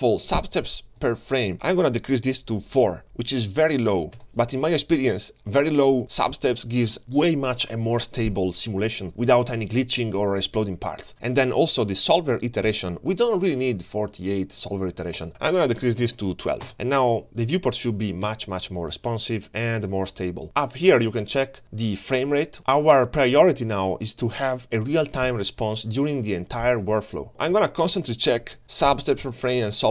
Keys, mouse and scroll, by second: 1.4-4.4 drag, 14.2-16.1 drag, 16.7 click, 17.4 space, 18.2 g, 27.3 g, 27.6 space.